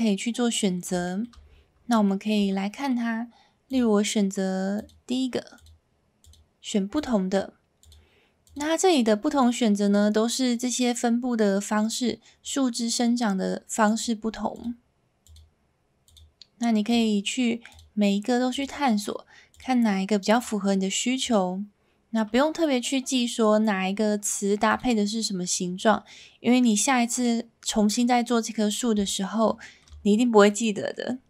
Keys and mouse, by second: 1.0 shift+middle drag, 2.0 shift+middle drag, 2.7 middle click, 3.8-4.9 drag, 5.7-6.3 drag, 6.9-7.9 drag, 8.5-9.4 drag, 14.6-15.4 drag, 16.0-17.0 drag, 17.7-18.6 drag, 19.5-20.4 drag, 21.2-24.8 drag, 29.6 shift+middle drag, 30.5 middle click.